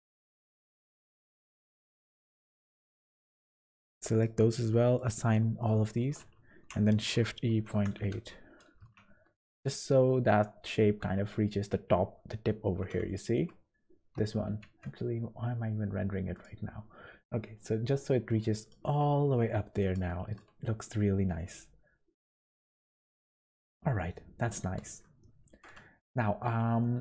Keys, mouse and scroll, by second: 0.1 shift+click, 0.7 shift+middle click, 2.0 click, 4.1 click, 5.7 middle click, 6.5 shift+e, 8.9 Tab, 12.5 scroll up 4, 13.1 shift+middle click, 13.6 scroll up 2, 14.6 z, 15.5 scroll down 4, 16.3 click, 16.9 scroll up 2, 18.6 click, 18.9 Tab, 19.3 1, 19.8 click, 20.2 g, 23.0 Tab, 23.3-24.0 scroll down 10, 24.0 middle click, 24.9-25.5 scroll down 2, 25.2 shift+middle click, 25.8-26.6 scroll down 4, 26.8 shift+middle click.